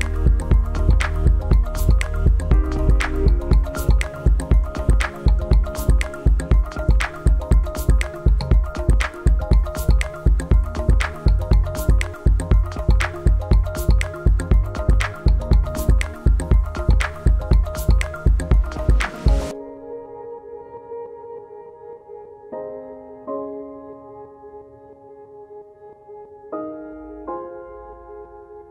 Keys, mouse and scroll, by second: 4.1 click, 20.6 click.